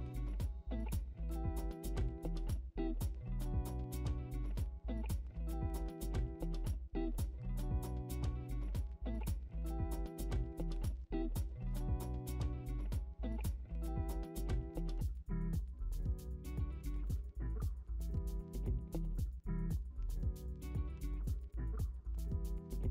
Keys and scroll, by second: 1.4 ctrl+d, 2.1-4.8 typing, 6.3 ctrl+d, 6.3-10.9 typing, 8.4 ctrl+d, 12.4 ctrl+d, 12.5 m, 12.9 v, 13.4 ctrl+d, 13.6 m, 15.0 ctrl+d, 15.2-17.8 typing, 18.4 ctrl+t, 19.0-20.0 Return, 20.0 ctrl+z, 22.1 ctrl+d, 22.8-22.9 typing.